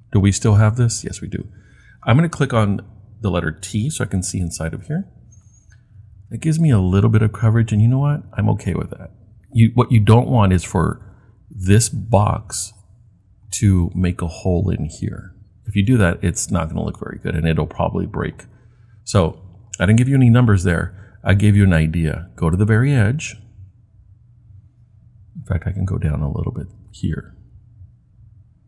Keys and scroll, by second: 4.5 t.